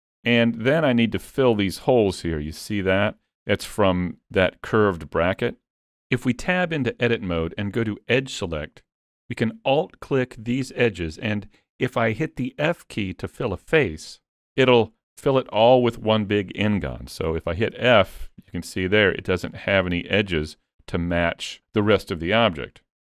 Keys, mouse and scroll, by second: 0.3 scroll up 1, 0.6 shift+middle click, 0.9-1.9 scroll up 3, 1.2 shift+middle click, 1.6 middle click, 5.9 Tab, 6.3 middle click, 7.3 2, 8.7 middle click, 9.5 shift+middle click, 10.7 alt+click, 11.2 middle click, 14.4 middle click, 18.5 middle click.